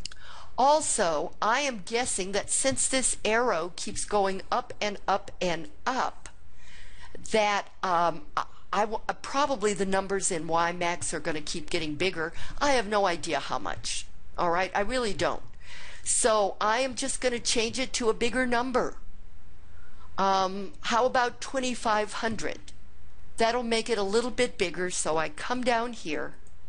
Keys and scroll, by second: 25.5 Down, 26.4 Down.